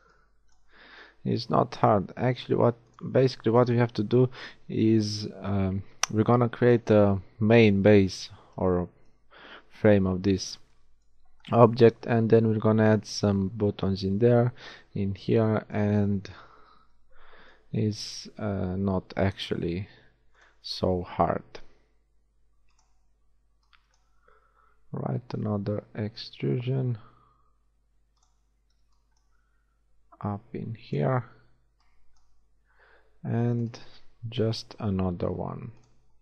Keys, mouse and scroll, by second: 0.1 b, 1.1 g, 17.3 b, 19.5 e, 21.3 g, 23.2 a, 23.5 b, 24.2 g, 28.5 a, 28.7 b, 29.3 g, 31.3 b, 32.8 r, 34.4 e, 35.9 g.